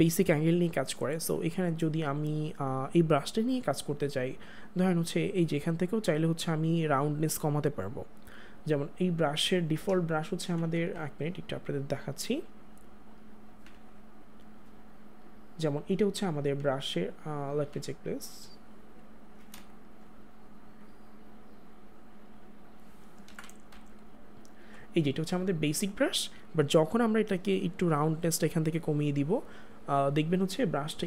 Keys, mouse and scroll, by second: 5.6 click, 9.7 [, 10.2 [, 10.3 [, 11.9 click, 15.1 click, 16.5-18.7 ], 17.0 click, 19.5 space, 19.7 click, 22.9 click, 23.2 ctrl+z, 24.5-26.7 ], 27.7 ].